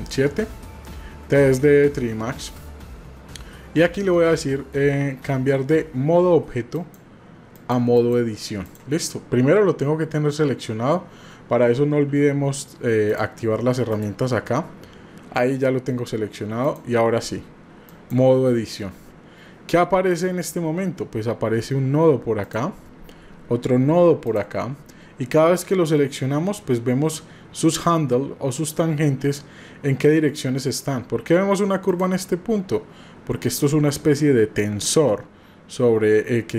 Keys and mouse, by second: 6.8-8.7 drag, 13.1 click, 14.0-18.3 drag, 24.2 click.